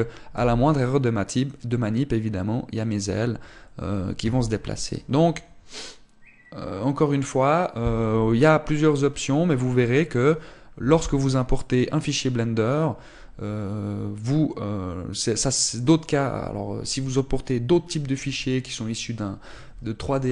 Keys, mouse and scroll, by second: 1.0 g.